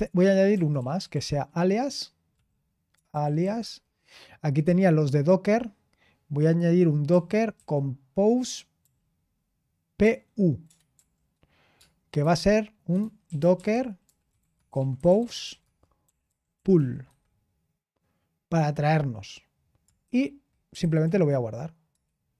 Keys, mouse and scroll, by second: 0.0-1.6 typing, 3.1-3.6 typing, 7.1-7.5 typing, 8.8 typing, 10.0-10.9 typing, 12.2-17.5 typing, 20.4-21.5 typing, 21.9 Return.